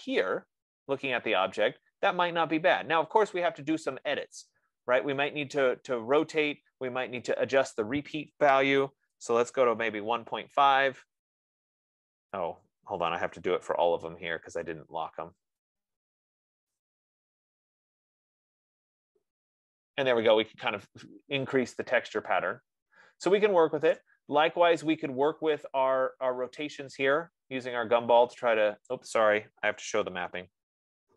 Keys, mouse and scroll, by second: 8.2-13.1 drag, 9.0-10.3 typing, 13.7-17.5 typing, 14.2 Tab, 20.9-21.6 scroll, 21.9 F15, 24.2 right click, 29.3 click, 30.8 ctrl+z.